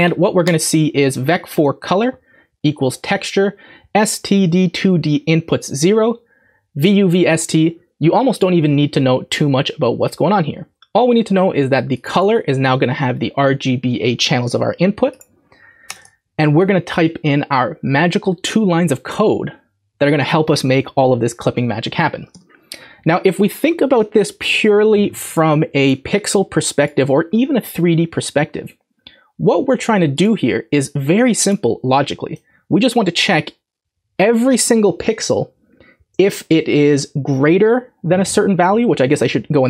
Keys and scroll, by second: 15.9 Return, 16.0 Return, 21.5 Up, 22.1 Return, 22.3 Tab.